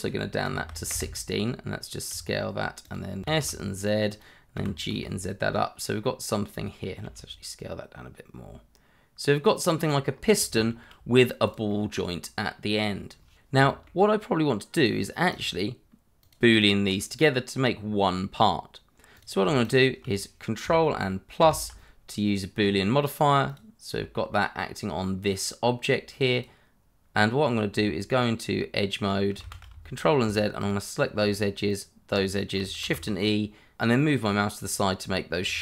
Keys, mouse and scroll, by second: 0.4 1, 0.6 6, 0.9 Return, 2.1 s, 2.8 click, 3.2 s, 3.4 z, 4.1 click, 4.5 g, 4.9 z, 6.4 click, 7.0 s, 9.2 click, 9.5 scroll up 1, 9.7 shift+middle click, 10.1 click, 10.2 middle click, 10.9 click, 11.1 Escape, 11.3-12.2 typing, 11.5 Escape, 11.9 click, 12.2 click, 12.4 click, 12.4 Tab, 12.7 ctrl+r, 12.7 click, 12.9 Tab, 13.2 alt+click, 13.3 q, 13.9 click, 14.0 alt+click, 14.1 middle click, 14.2 alt+shift+click, 14.4 scroll down 1, 14.6 alt+shift+click, 14.7 scroll up 1, 14.8 shift+e, 14.9 click, 15.0 Tab, 15.3 ctrl+3, 15.5 scroll up 1, 15.6 middle click, 15.7 scroll down 1, 16.0 click, 16.6 double click, 19.1 click, 21.4 ctrl+KP_Add, 23.5 click, 26.3 click, 27.7 Tab, 29.4 shift+z, 29.8 shift+middle click, 30.6 alt+click, 31.7 alt+shift+click, 32.8 shift+e, 35.1 click.